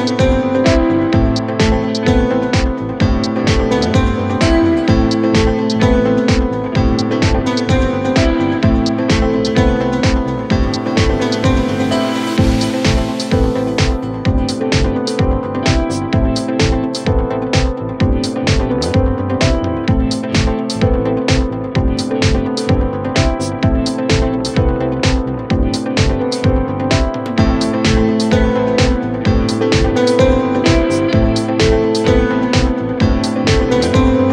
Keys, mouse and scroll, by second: 0.1 Delete, 0.3 x, 1.4-3.7 typing, 4.7-6.9 typing, 7.9 scroll down 3, 8.2 middle click, 8.5 scroll up 1, 9.2 space, 11.5-13.0 scroll up 2, 15.1 space, 23.3-23.7 scroll down 9, 23.7 scroll up 2, 24.5 space, 24.8 middle click, 25.1 scroll up 1, 28.9 ctrl+Left, 29.5 shift+Delete, 29.7 typing, 31.3 typing, 32.8-33.5 typing, 33.9 Return.